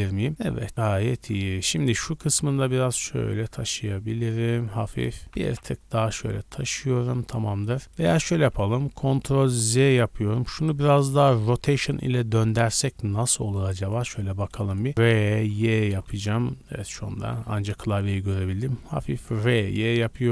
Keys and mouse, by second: 1.5 2, 1.7 click, 1.8 middle click, 2.2 g, 2.7 click, 5.7-6.8 shift+middle drag, 7.1 Tab, 8.5 ctrl+z, 8.8 ctrl+z, 9.2 ctrl+z, 10.3 Tab, 10.9 shift+drag, 11.0 shift+middle click, 11.3 middle drag, 11.4 middle click, 11.6 click, 11.7 middle drag, 12.4-13.3 shift+middle drag, 13.6 middle click, 13.7 click, 14.2 shift+drag, 15.2 e, 15.7 y, 17.0 r, 19.4-20.3 middle drag.